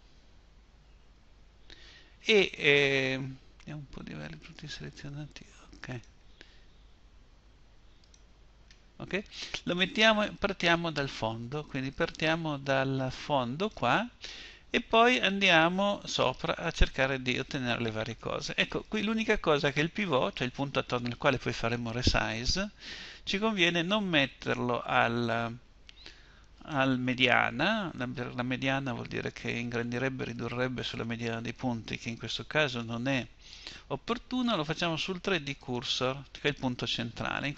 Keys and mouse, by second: 0.0 a, 0.3 a.